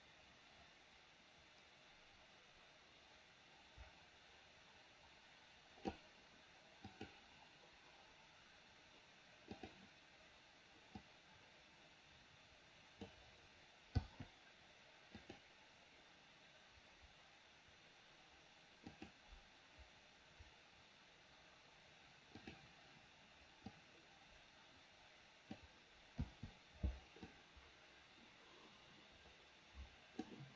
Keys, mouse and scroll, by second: 7.0 click, 9.6 click, 11.1 click, 11.3-13.1 drag, 14.1 i, 15.2 click, 19.0 click, 22.5 click, 23.7 click, 23.9-25.6 drag, 26.3 i, 27.3-30.4 drag.